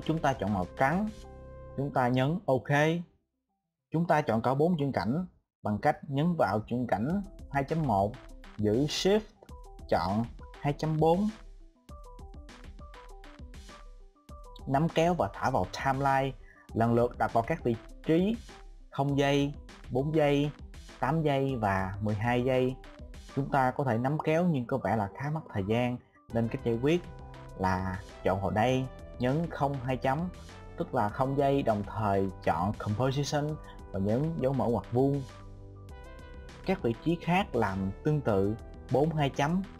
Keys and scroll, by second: 36.4 [.